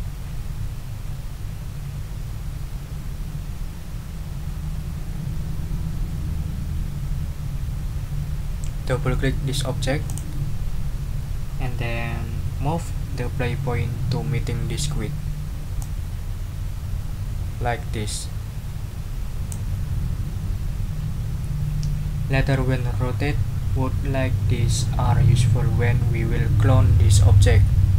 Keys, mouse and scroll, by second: 10.0 click, 15.8-19.7 drag.